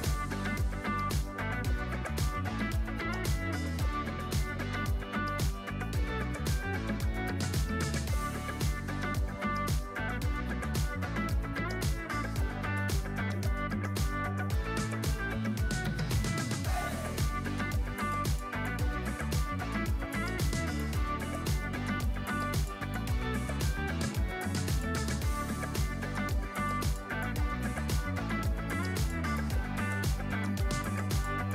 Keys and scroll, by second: 0.1 g, 0.6 alt+q, 0.9 alt+q, 1.4 g, 2.1 alt+q, 2.5 alt+q, 2.7 g, 3.5 g, 3.8 alt+q, 4.3 alt+q, 5.5 shift+x, 6.7 shift+x, 7.1 alt+q, 8.4 j, 9.5 alt+q, 10.0 shift+x, 11.4 g, 11.8 alt+q, 13.2 j, 14.6 j, 15.7 j, 16.0 alt+q, 16.9 alt+q, 17.4 alt+q, 17.6 Tab, 27.4 2, 28.2 2, 28.9 g, 30.0 g.